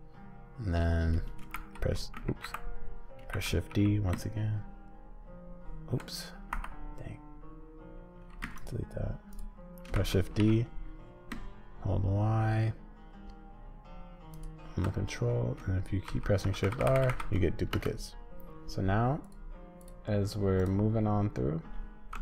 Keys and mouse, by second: 1.5 shift+r, 2.3 ctrl+z, 3.3 shift+d, 8.4 x, 9.9 shift+d, 16.1-17.7 typing, 19.3 click, 19.8 click, 20.6 click.